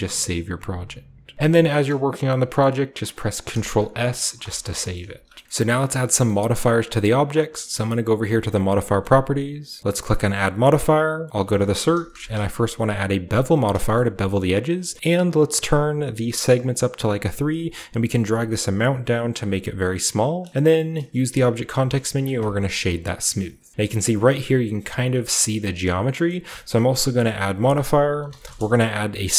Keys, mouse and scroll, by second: 1.3 ctrl+s, 2.3-3.7 scroll up 1, 2.6-3.7 middle drag, 4.4 ctrl+s, 5.1 ctrl+s, 5.4 ctrl+b, 5.4 Tab, 5.7 shift+middle click, 5.7 shift+scroll up 1, 5.9 middle click, 6.2-8.2 middle drag, 8.4-9.6 drag, 10.1 click, 11.9-12.3 typing, 13.3 click, 13.9-14.7 shift+scroll up 1, 13.9-14.8 shift+middle drag, 14.7-16.5 shift+scroll up 1, 16.5 middle click, 16.6 middle click, 17.8-20.4 shift+middle drag, 20.5-22.0 scroll up 1, 21.2 click, 21.2 middle click, 21.2 typing, 22.3-23.7 drag, 22.3-25.9 middle drag, 22.9-23.7 scroll down 1, 23.7-25.9 shift+scroll up 1, 26.2 shift+middle drag, 26.7-27.4 shift+middle drag, 27.4 click, 28.1 typing.